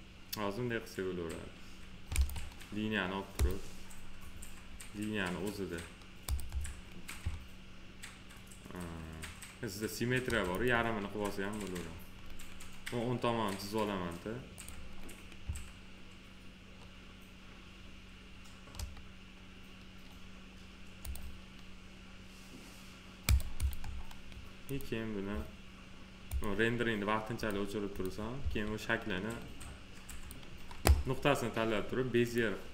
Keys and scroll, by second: 28.3 1.